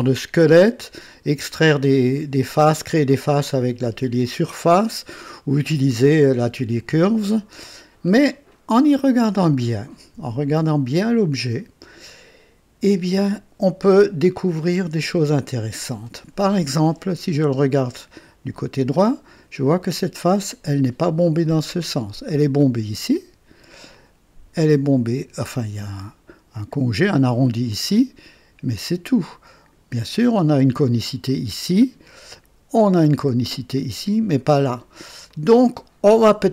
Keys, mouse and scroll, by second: 0.2-1.4 drag, 2.5 click, 3.6-5.4 drag, 7.2-17.2 drag, 17.0 KP_3, 21.9-23.0 drag, 23.9-24.7 drag, 27.7-29.9 drag, 30.1 KP_3, 31.2-31.8 drag, 32.4 KP_1, 35.3-36.5 drag.